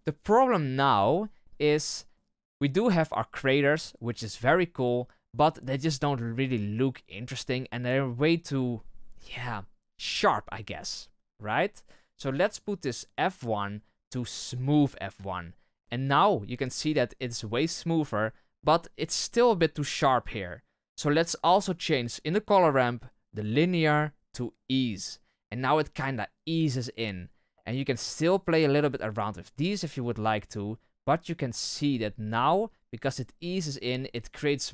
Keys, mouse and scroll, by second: 10.7 scroll down 1, 14.5-34.7 drag.